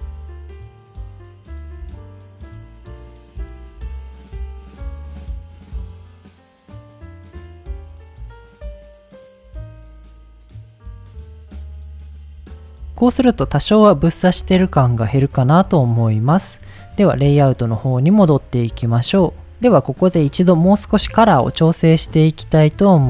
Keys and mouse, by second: 0.1 click, 0.5 click, 0.7 middle click, 0.9 click, 1.1 click, 1.4 middle click, 1.7 click, 1.9 click, 2.0 click, 2.4 click, 2.5 click, 2.7 click, 3.1 ctrl+z, 3.2 click, 3.5 middle click, 3.8 click, 4.0 click, 4.4 click, 4.7 click, 4.9 click, 5.2 click, 5.5 click, 5.7 middle click, 6.1 middle click, 6.3 click, 6.5 click, 6.6 click, 6.7 click, 6.9 click, 7.0 click, 7.5 click, 7.9 click, 8.1 click, 8.2 click, 8.5 middle click, 8.7 click, 8.9 middle click, 9.5 click, 10.2 click, 10.3 click, 10.5 click, 10.6 click, 11.0 middle click, 12.1 middle click, 12.6 middle click, 13.1 middle click, 13.9 middle click, 14.4 middle click, 16.6 click, 18.3 click, 18.9 click, 19.7 middle drag, 21.8 click, 22.9 click.